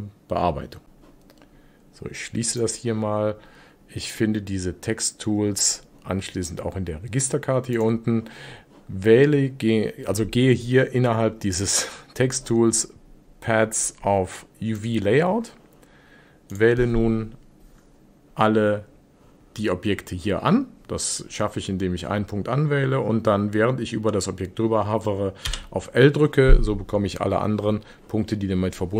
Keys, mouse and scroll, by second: 4.1-7.1 drag, 7.8 click, 14.8 click, 16.6 click, 25.5 l.